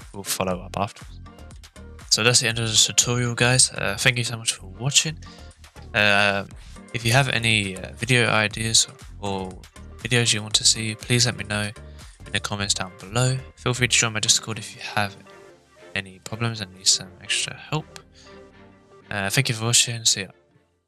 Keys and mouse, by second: 1.2 space.